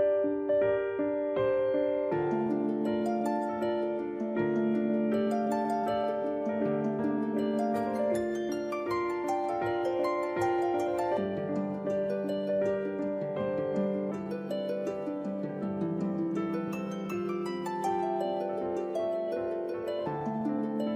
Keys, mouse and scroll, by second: 1.2 middle click, 2.0 s, 4.6 middle click, 5.9 middle click, 7.1 a, 7.7 alt+right click, 8.1 middle click, 9.2 e, 12.7 click, 13.2 s, 17.6 click, 18.3 e, 20.2 click, 20.6 s.